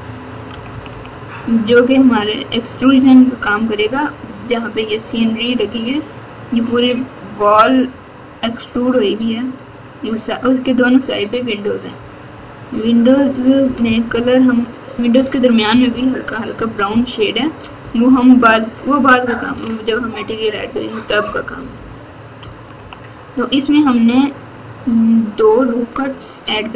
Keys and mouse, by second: 0.0-0.7 typing, 12.7 KP_6, 13.6 KP_4, 13.8 KP_4, 15.1 KP_Subtract, 15.7 KP_4, 15.8 KP_4, 16.8 ctrl+KP_4, 17.4 ctrl+KP_4, 17.5 ctrl+KP_4, 18.2 KP_4, 18.4 KP_4, 18.6 KP_4, 19.3 KP_Subtract, 19.4 KP_Subtract, 19.9 ctrl+KP_4, 20.4 ctrl+KP_4, 20.5 ctrl+KP_4, 21.2 ctrl+KP_4, 21.4 ctrl+KP_4, 21.5 ctrl+KP_4, 21.7 ctrl+KP_4, 22.4 ctrl+KP_2, 24.7 KP_8.